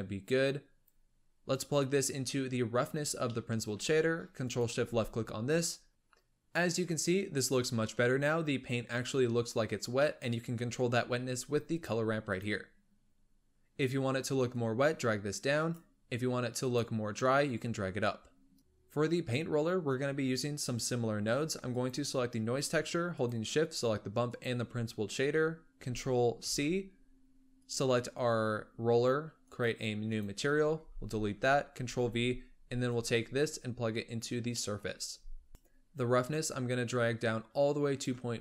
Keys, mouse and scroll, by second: 1.8-3.2 drag, 3.3-4.3 middle drag, 4.3 ctrl+shift+click, 5.9-7.3 middle drag, 7.3-8.9 scroll up 1, 8.9-10.5 middle drag, 10.5-11.6 scroll up 1, 11.6 click, 16.6 click, 18.6 click, 21.6 click, 23.0 shift+click, 24.2 shift+click, 26.3 ctrl+c, 27.5 click, 29.3-30.6 drag, 30.6 x, 31.8 ctrl+v, 32.8-34.5 drag, 34.5 middle click, 35.0-35.5 scroll up 1, 35.5 click, 36.2-38.4 drag.